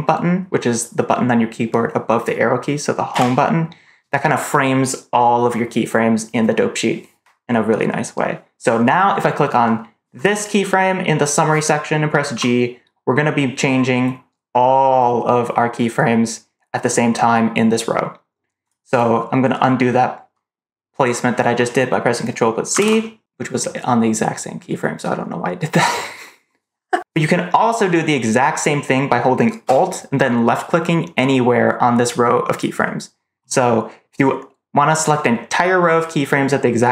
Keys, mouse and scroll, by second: 3.0 Home, 10.0 click, 12.2 g, 22.7 ctrl+z, 32.4 alt+click.